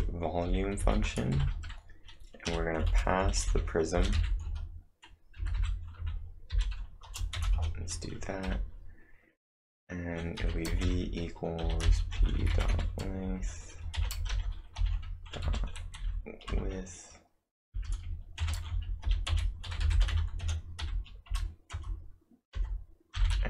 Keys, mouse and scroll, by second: 0.0-0.1 typing, 1.3-8.4 typing, 10.2-16.0 typing, 16.5 Return, 17.7-20.8 typing, 21.3 Return.